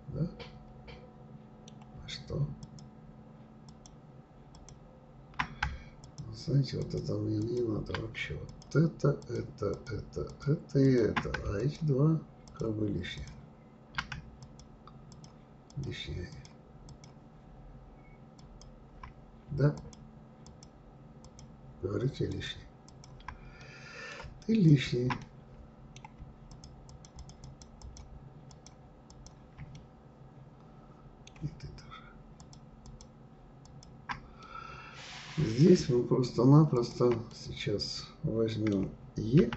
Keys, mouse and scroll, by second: 2.6 shift+click, 3.6 shift+click, 4.5 shift+click, 6.0 ctrl+click, 6.8 ctrl+click, 7.4 ctrl+click, 8.5 shift+click, 9.2 shift+click, 9.7 shift+click, 10.2 shift+click, 10.8 shift+click, 11.6 ctrl+click, 12.4 ctrl+click, 13.1 ctrl+click, 14.4 shift+click, 15.1 shift+click, 15.7 shift+click, 16.3 shift+click, 16.8 shift+click, 18.3 shift+click, 19.7 shift+click, 20.4 shift+click, 21.2 shift+click, 22.3 shift+click, 22.8 shift+click, 23.6-24.6 middle drag, 24.6 shift+click, 25.2-26.5 middle drag, 26.5 shift+click, 26.8 shift+click, 27.1 shift+click, 27.4 shift+click, 27.8 shift+click, 28.5 shift+click, 29.1 shift+click, 29.7-32.3 middle drag, 32.3 shift+click, 32.8 shift+click, 33.6 shift+click, 34.4-36.7 middle drag, 36.7 shift+click, 37.3-39.3 middle drag, 39.3 e.